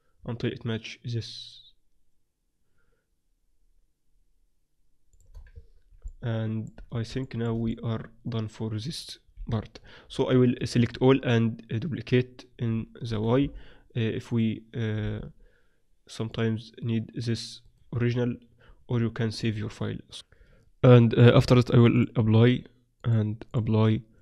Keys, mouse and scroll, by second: 5.3 middle click, 5.5 Tab, 9.3 KP_7, 10.3 a, 10.5-11.9 drag, 10.9 a, 10.9 z, 13.1 shift+d, 15.0 m, 17.6 click, 18.2 middle click, 18.4 click, 18.4 z, 19.2 middle click, 21.9-24.2 drag.